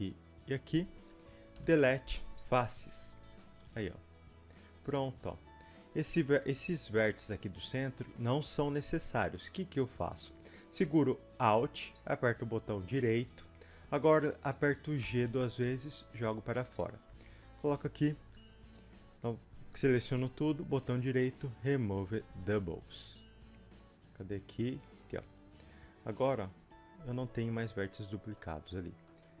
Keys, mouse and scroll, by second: 2.5 Delete, 3.4-10.0 middle drag, 10.0 click, 13.0 alt+click, 13.5-13.9 scroll down 1, 13.9-15.1 middle drag, 15.1 g, 17.1 a, 25.3 click, 26.6 g, 27.6-29.4 middle drag.